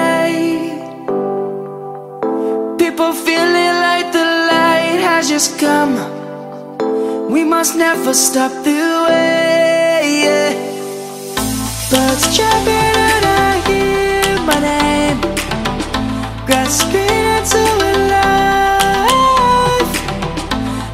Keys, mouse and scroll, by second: 2.4-5.8 drag, 6.4 F10, 6.9 click, 7.0 F10, 7.3 right click, 8.3 click, 9.4-12.3 typing, 13.3 Return, 15.1 click, 15.5 right click, 16.2-16.6 scroll down 1, 16.9-19.6 drag, 19.6 right click, 20.6 scroll down 1.